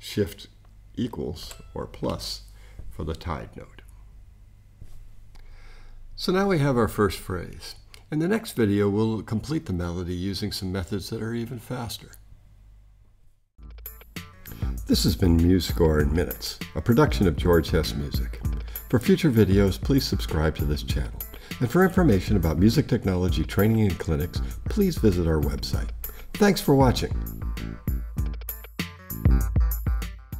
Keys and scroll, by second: 1.4 shift+=.